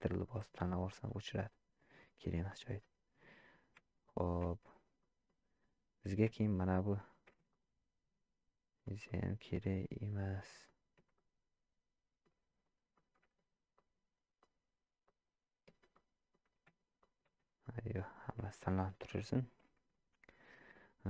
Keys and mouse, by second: 0.0 middle click, 0.7 ctrl+click, 1.9-3.2 middle drag, 3.8 Tab, 4.5 Tab, 5.0 middle click, 6.5 shift+click, 9.0-10.1 middle drag, 10.7 shift+middle click, 11.1-12.2 middle drag, 12.9 middle click, 13.8 ctrl+click, 14.4 ctrl+click, 15.0 ctrl+click, 16.1 middle click, 17.0 shift+click, 17.7 middle click, 18.5 shift+middle click.